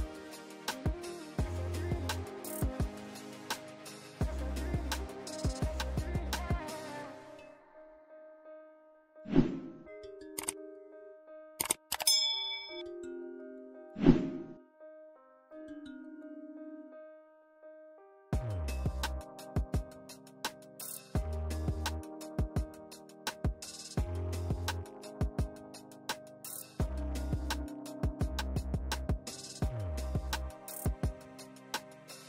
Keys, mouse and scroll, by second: 0.2 right click, 0.7 click, 1.0 alt+Tab, 1.9 ctrl+v, 2.4 ctrl+space, 2.5-2.9 ctrl+click, 2.7 ctrl+space, 3.1-3.7 drag, 4.3-5.0 shift+click, 6.2 ctrl+shift+], 7.1 shift+click, 7.6 right click, 8.3 click, 9.5 ctrl+space, 9.7-10.0 ctrl+click, 9.9 ctrl+space, 10.7 click, 11.6-12.2 shift+drag, 13.1-14.5 shift+drag, 15.9-16.4 shift+click, 17.9 click, 18.3 ctrl+space, 18.4-18.7 ctrl+click, 18.6 ctrl+space, 19.0 click, 20.1 ctrl+[, 21.4 ctrl+shift+[, 22.1 ctrl+], 23.7 ctrl+[, 24.5-24.9 scroll up 1, 24.9 click, 26.5-27.1 drag, 28.0 click, 31.0 click, 31.3 ctrl+space, 31.4-31.7 ctrl+click, 31.6 ctrl+space, 31.8-32.2 click, 32.1 space.